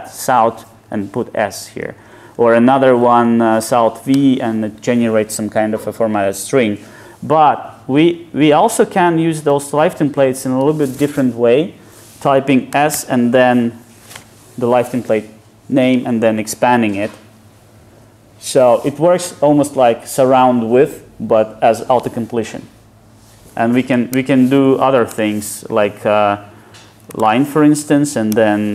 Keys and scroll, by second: 0.3 Tab, 1.9 Tab, 2.3 super+z, 4.1 super+z, 4.2 Tab, 8.1 super+z, 9.3 super+z, 12.8 super+z, 16.5 Tab.